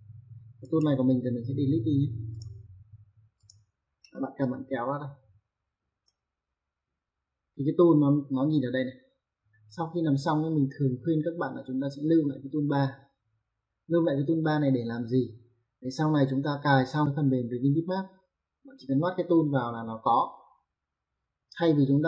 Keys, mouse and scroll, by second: 0.4 right click, 2.1 click, 3.1 click.